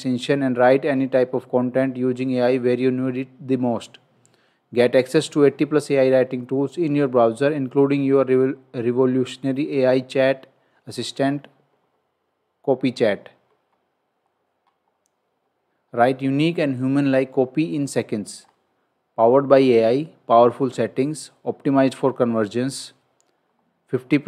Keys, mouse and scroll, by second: 13.4-13.7 scroll down 1, 15.4-15.9 scroll up 1, 18.4 scroll up 1, 18.5-19.3 scroll down 1, 22.5 scroll down 1, 23.4-23.8 scroll up 1.